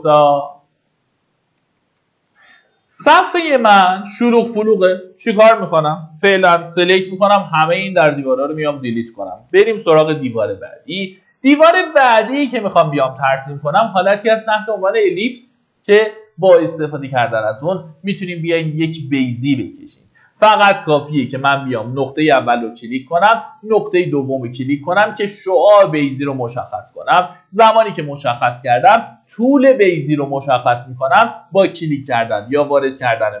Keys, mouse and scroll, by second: 1.3 Escape, 2.6-4.9 drag, 6.3 Delete, 7.3 middle click, 9.0-9.9 typing, 19.0 click, 20.0 scroll up 1, 21.4 click.